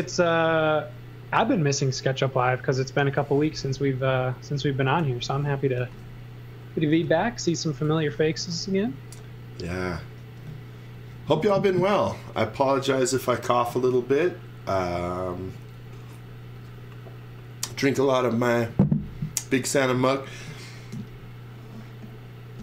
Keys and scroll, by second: 3.7 e, 4.7 e, 5.0 z, 5.7 x, 6.9 x, 7.8 z, 8.3 x.